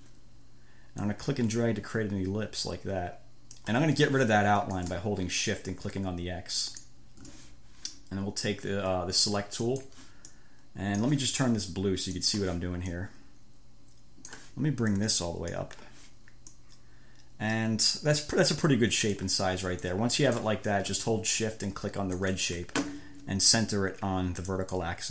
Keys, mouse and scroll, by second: 1.4-4.1 drag, 6.8 shift+click, 9.9 click, 10.6 click, 12.5 click, 13.2-14.8 drag, 15.2 click, 16.8-19.6 drag, 20.1 click, 22.4 shift+click, 24.7 click.